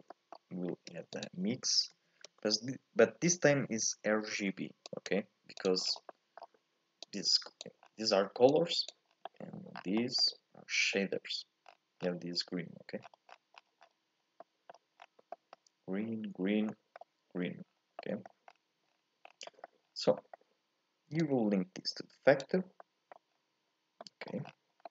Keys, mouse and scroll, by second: 7.1 click, 22.7-24.9 scroll up 1.